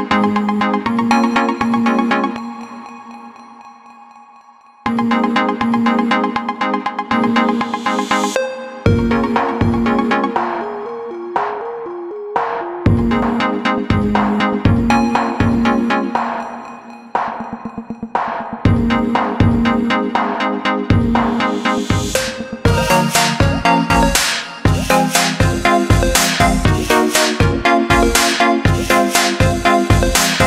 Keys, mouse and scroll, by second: 0.2-1.0 scroll down 3, 2.1-2.4 alt+scroll up 1, 3.3 alt+scroll down 1, 3.8 scroll down 1, 5.4-6.8 scroll down 1, 6.8 click, 11.0 alt+scroll up 1, 12.9 click, 18.0 BackSpace, 19.0 click, 23.4-24.0 alt+scroll down 2, 25.6 click, 27.4 scroll up 1.